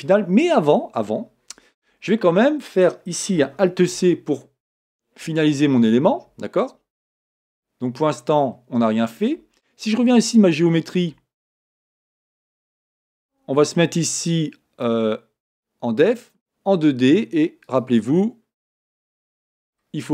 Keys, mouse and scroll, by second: 1.6-4.0 scroll down 1, 4.0 alt+c, 7.4 Tab, 7.8-8.3 scroll down 2, 8.3-12.1 scroll up 2, 12.1-15.2 scroll up 1, 15.2-15.8 scroll up 1, 15.8-20.1 drag, 19.6-20.1 scroll down 2.